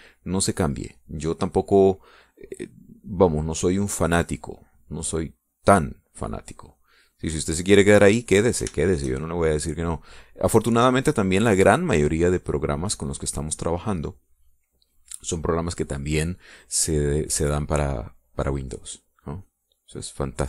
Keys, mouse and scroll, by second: 4.6-10.0 drag, 10.0 shift+right click, 10.2 shift+right click, 10.2 shift+click, 11.0 click, 16.9 click, 18.0 click, 18.1 middle click, 18.6 click, 18.6 middle click, 18.9 click, 19.0 middle click.